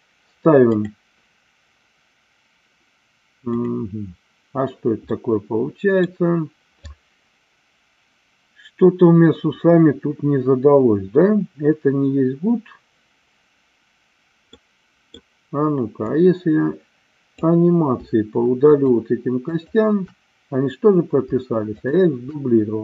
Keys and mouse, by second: 0.7 click, 3.5 click, 5.2 middle click, 14.5 middle click, 16.0-17.5 drag, 18.6 shift+click, 21.8 shift+click.